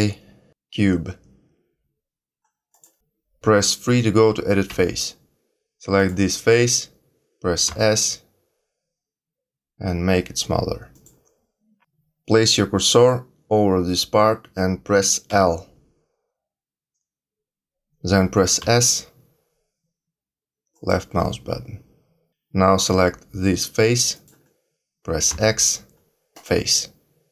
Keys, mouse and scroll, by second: 4.6 3, 5.9 click, 7.6 s, 15.2 l, 18.6 s, 24.1 click, 25.3 x.